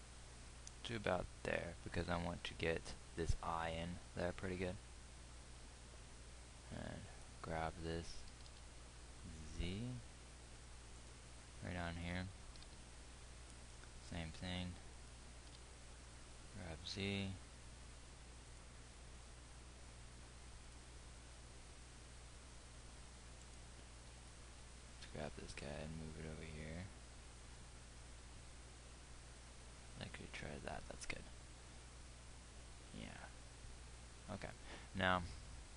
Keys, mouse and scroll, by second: 8.9 g, 13.3 g, 15.9 g, 21.7 g, 25.3 g.